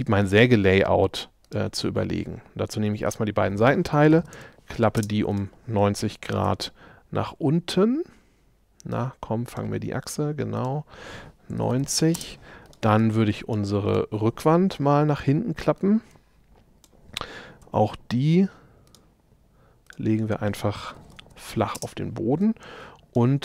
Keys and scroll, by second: 3.9-5.0 typing, 6.5 q, 11.6 9, 11.8 Return, 12.2 space, 17.7 q, 20.7-22.5 typing.